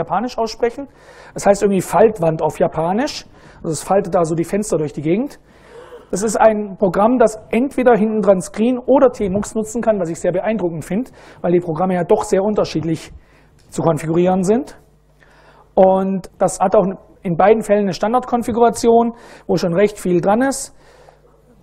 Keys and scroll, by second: 19.3 super+Right, 19.9-21.6 typing.